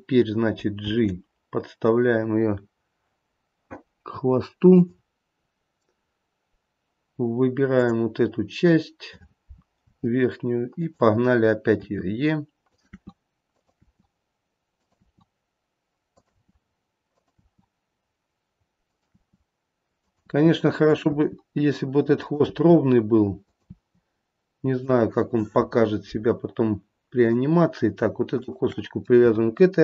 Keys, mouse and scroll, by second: 1.1 g, 8.0 click, 10.1 g, 12.1 e, 15.3 e, 16.5 e, 19.4 e, 20.4 e, 22.6 e, 23.9 e, 27.3 click, 28.5 shift+click.